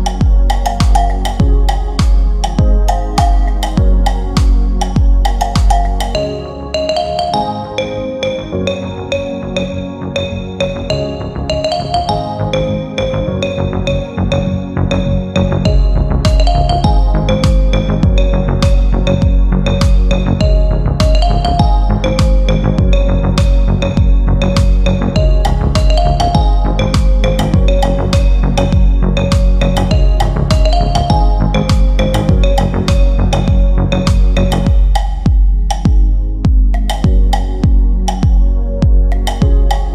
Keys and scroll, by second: 29.0 Delete.